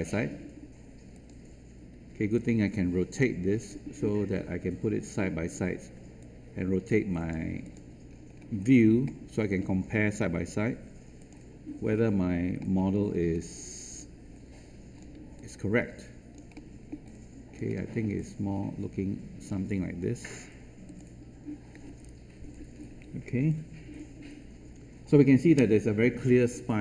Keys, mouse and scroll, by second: 8.0-8.8 scroll down 1, 9.0 alt+middle click, 11.1 click, 12.5 middle click, 13.1-13.9 scroll up 1, 13.9 click, 15.3 alt+click, 16.5 alt+middle click, 17.2 alt+click, 17.7 alt+middle click, 18.4-19.4 alt+drag, 20.8 click.